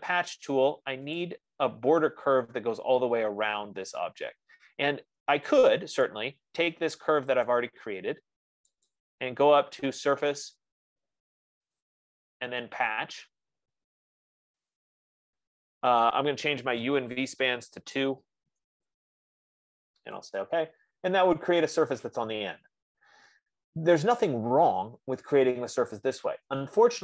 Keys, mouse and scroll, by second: 1.7 click, 5.2 middle click, 6.5 click, 7.8 click, 9.3 click, 12.1 click, 15.1 click, 17.7 2, 19.0 Tab, 19.1 Tab, 21.2 click, 21.7 middle click, 21.9 middle click, 26.6 F15.